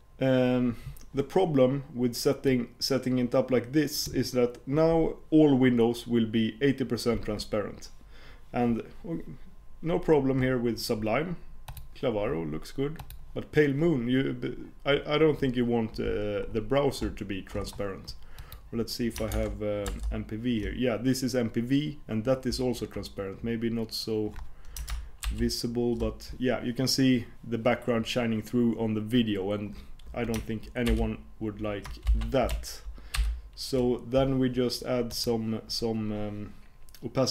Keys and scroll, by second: 19.3 super+Tab, 25.3 shift+super+p, 30.9 super+o, 33.2 super+p.